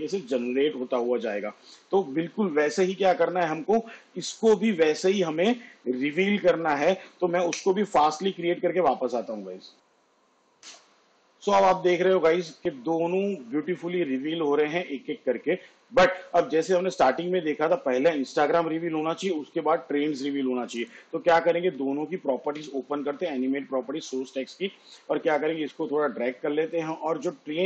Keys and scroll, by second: 10.8 space, 17.7 space.